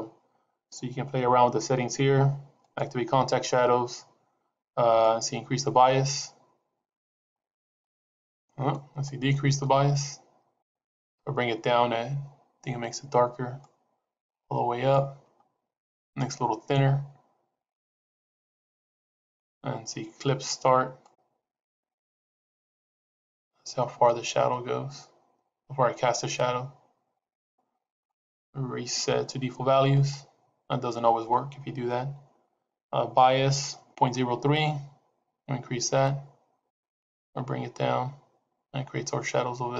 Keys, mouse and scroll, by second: 2.5 click, 4.9 click, 8.9 click, 13.5 click, 16.8 click, 20.9 click, 27.9 right click, 34.0 click.